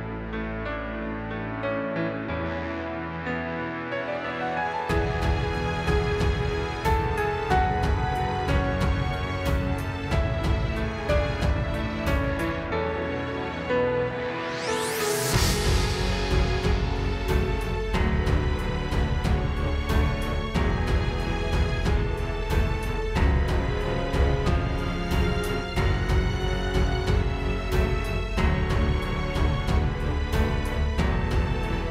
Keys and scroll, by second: 0.9 space, 1.2 space, 1.9 super+space, 6.0 space, 7.6 space, 8.2 alt+super+space, 10.7 space, 12.3 space, 14.1 space, 14.5 space, 20.8 space, 25.4 space, 26.9 space, 30.2 space, 30.7 super+space, 31.5 super+space.